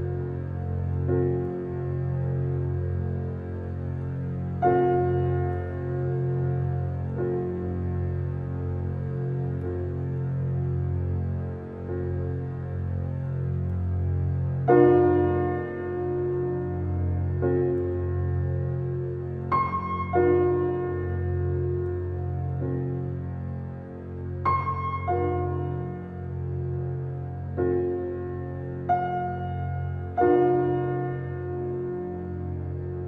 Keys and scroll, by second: 2.9 space, 12.1 ctrl+d.